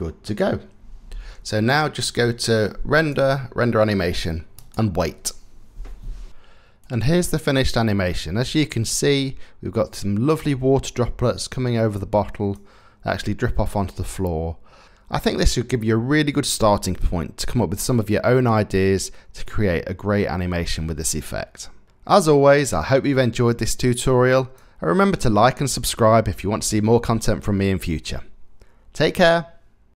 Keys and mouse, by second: 1.8 ctrl+s.